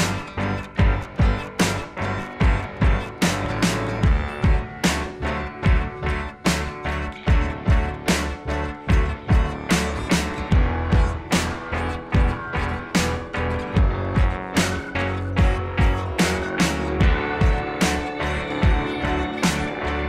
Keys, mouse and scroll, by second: 0.0-1.6 typing, 1.9 click, 3.2 click, 6.0 2, 6.2 Return, 7.5 z, 7.9 click, 8.0 space, 8.6 click, 9.2 ], 9.3 [, 9.6 ], 10.7 typing, 11.8 typing, 13.6-14.9 typing, 17.7 space, 17.9 [, 18.0 [.